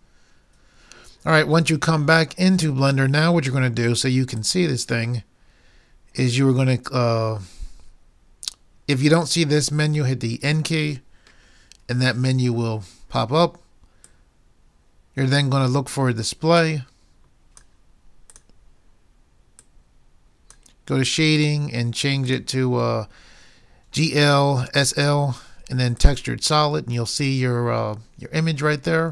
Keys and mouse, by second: 0.0-1.6 drag, 4.4 click, 11.9 n, 12.0 n, 14.1-16.0 drag, 16.6-24.5 drag, 26.0-27.8 drag.